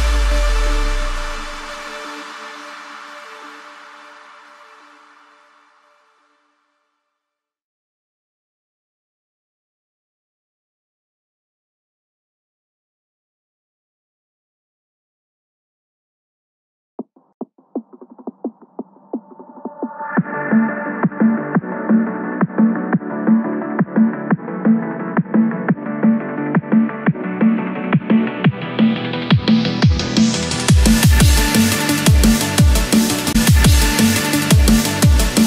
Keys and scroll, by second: 2.0 Return, 2.7 Escape, 6.4 Return, 7.1 Escape, 7.8 ctrl+-, 8.3 ctrl+-, 9.9 ctrl+=, 11.3 ctrl+=, 15.9 Return, 16.6 Escape, 17.3 ctrl+-, 18.8 ctrl+z, 19.4 Escape, 23.5 ctrl+z, 26.0 Return, 26.6 Escape, 29.6 Return, 30.3 Escape.